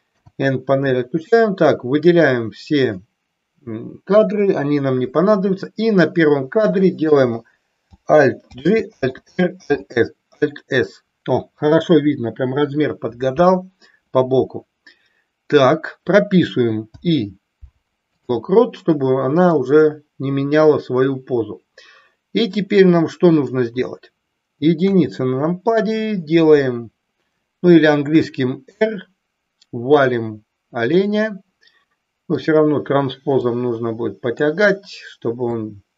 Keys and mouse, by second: 0.0 n, 1.6-3.0 drag, 4.1 Delete, 8.4 alt+g, 9.0 alt+r, 9.5 alt+s, 16.9 i, 19.4-23.5 middle drag, 24.7 KP_1, 28.1 r, 30.9 click, 33.5-34.5 drag, 35.5-35.9 drag.